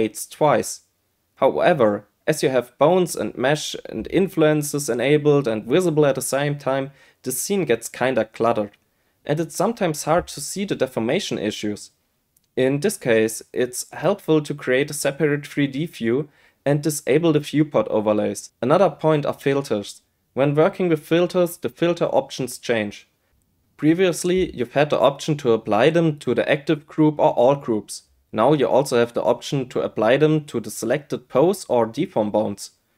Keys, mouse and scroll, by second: 0.0 click, 0.7 click, 1.1 shift+middle click, 1.6 shift+click, 1.8 shift+click, 2.0 shift+click, 2.8 middle click, 3.1 click, 3.5 click, 3.7 click, 4.8 click, 5.4 middle click, 5.8 ctrl+z, 5.9 ctrl+z, 6.2 click, 6.4 middle click, 6.9 click, 7.6 click, 8.5 click, 9.2 click, 11.6 click, 13.7 middle click, 14.1 shift+middle click, 14.3 middle click, 14.8 n, 15.2 click, 15.6 shift+middle click, 16.0 shift+middle click, 16.3 middle click, 16.8 q, 17.3 middle click, 18.3 click, 18.7 click, 20.3 click, 21.4 click, 21.8-23.3 drag, 23.4 click, 23.8 click, 24.2 click, 24.6 click, 27.4 q, 30.1-32.9 drag.